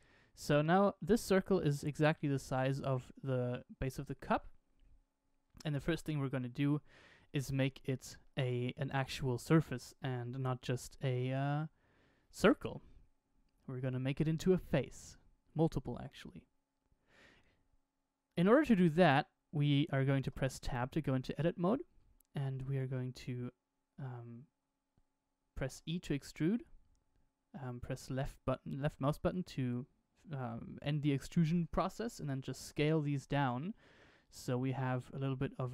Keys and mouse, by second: 0.4 middle click, 2.2 click, 2.9-4.2 middle drag, 6.8 shift+middle click, 8.2-9.4 middle drag, 10.3 Tab, 11.0 Tab, 20.2 Tab, 25.6 e, 32.2 s, 34.9-35.7 middle drag.